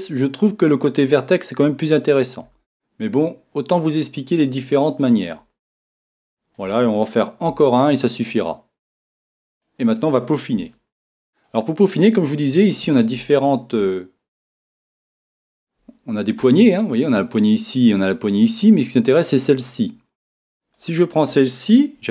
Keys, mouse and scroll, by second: 2.1 click, 2.4 e, 5.1 click, 6.2-9.5 middle drag, 7.5 e, 9.6 click, 10.8-22.1 middle drag.